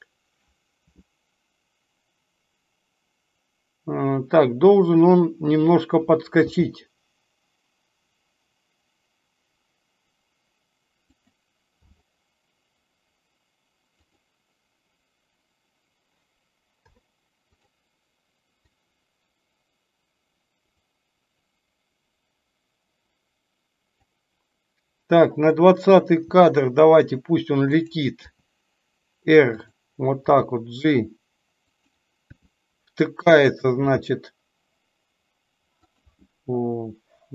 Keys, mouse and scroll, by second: 18.7-24.0 drag.